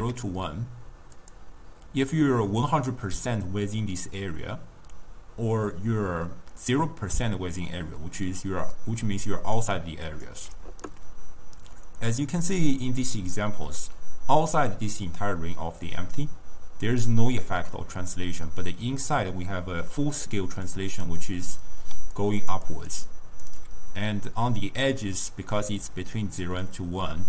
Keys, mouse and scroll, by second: 0.0 s, 9.1 d, 9.4 click, 9.6 d, 9.8 click, 10.3 d, 11.8 d, 12.1-15.2 middle drag, 20.8 drag, 21.3 click, 22.0 d, 22.2 click, 22.6 d, 22.8 click, 22.9 d, 23.2 click, 23.5 d.